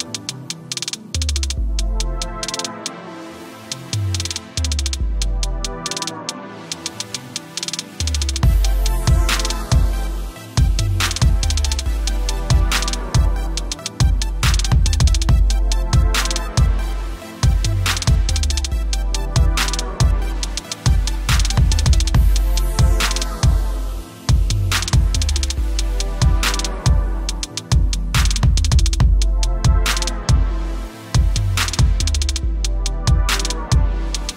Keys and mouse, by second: 0.0 =, 0.8 click, 1.7 ctrl+=, 2.0 space, 2.2 click, 4.1 click, 10.3 space, 10.4 click, 10.8 space, 11.9-13.1 typing, 13.0 click, 15.8 right click, 17.1 click, 18.1 t, 18.9 click, 19.9 click, 21.1 shift+click, 22.3 Return, 23.5 click, 32.7 typing.